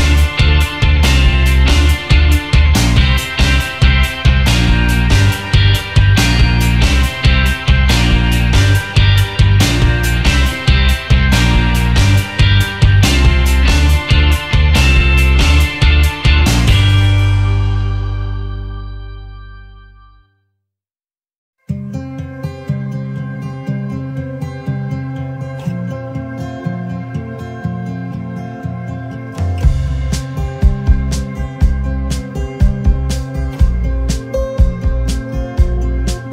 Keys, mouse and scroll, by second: 0.9 Delete, 2.2 alt+scroll up 1, 14.1 shift+click, 15.9 shift+click, 16.8 shift+click, 17.9 shift+click, 18.6 shift+click, 19.6 shift+click, 27.8 ctrl+z, 30.3 shift+click, 31.0 shift+click, 31.8 shift+click, 32.6 shift+click, 33.4 shift+click, 35.3 shift+click, 36.1 shift+click.